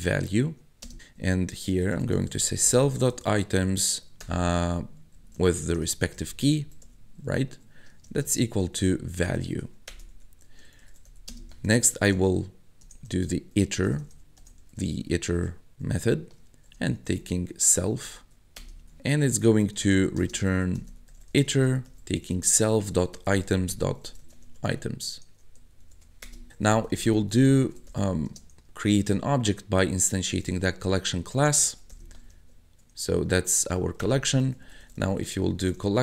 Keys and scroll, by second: 0.0-29.0 typing, 1.0 Tab, 9.9 Return, 10.2 Tab, 18.6 Return, 18.8 Tab, 26.2 Return, 30.2-32.9 typing, 34.0 Return, 34.2-36.0 typing.